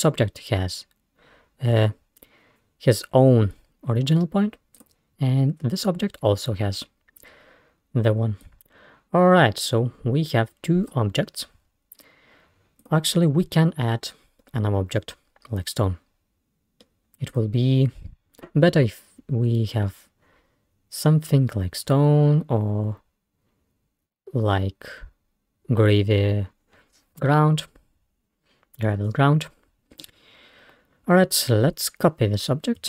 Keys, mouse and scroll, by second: 0.4 scroll down 1, 0.6-1.1 scroll up 1, 4.8 click, 5.2-5.7 scroll down 1, 5.7-6.5 scroll up 1, 7.2-7.8 scroll down 2, 8.5-11.2 drag, 12.8 click, 14.4-17.2 middle drag, 17.3 click.